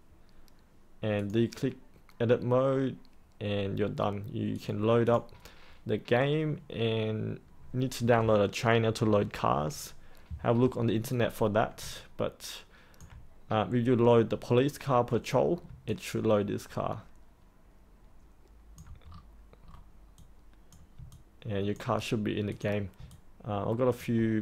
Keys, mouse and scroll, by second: 11.9 alt+click, 15.8-18.7 alt+drag, 19.0-19.6 scroll up 1, 19.6-20.1 scroll down 1, 20.1 click, 21.0 alt+click, 22.4 click, 23.1 alt+click.